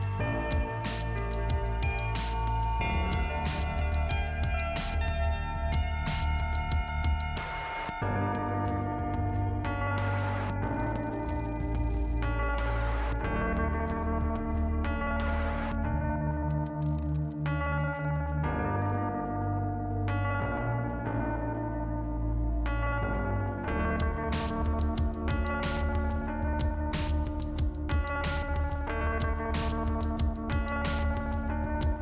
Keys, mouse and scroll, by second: 1.3 click, 3.3 click, 3.4 click, 5.3 click, 5.8 scroll down 2, 9.3 click, 11.7 click, 13.5 click, 17.0 scroll up 2, 18.2 click, 18.6 click, 18.7 double click, 18.8 double click, 19.2 double click, 19.3 double click, 19.3 double click, 20.6 click, 20.8 click, 28.8 click, 30.9 click, 31.1 click, 31.3 click, 31.4 double click, 31.5 double click, 31.7 double click.